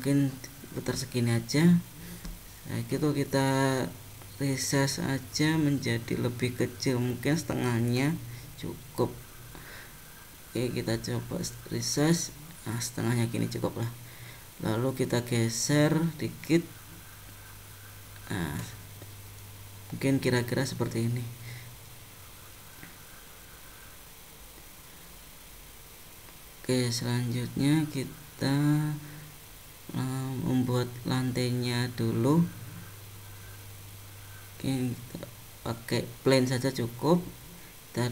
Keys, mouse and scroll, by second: 3.1 s, 9.3 s, 14.5 g, 18.7 middle click, 21.3 scroll up 2, 21.9 middle click, 24.7 scroll down 1, 27.7 middle click, 29.0 click, 29.5 middle click, 31.5 click, 33.4 click, 34.8 shift+a.